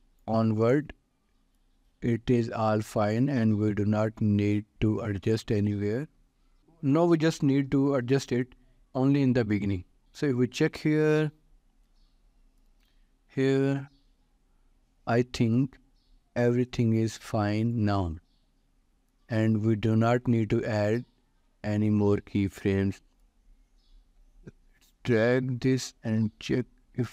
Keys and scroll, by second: 8.2 ctrl+s.